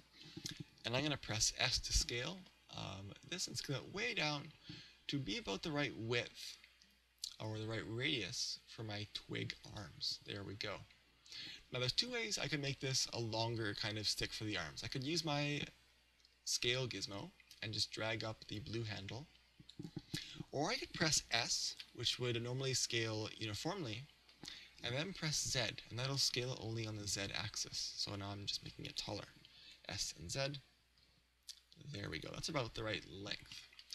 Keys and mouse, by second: 2.1 s, 9.8 click, 16.6 click, 18.6 click, 20.2 click, 21.8 s, 29.0 click, 29.6 s, 32.2 click, 33.6-33.9 middle drag.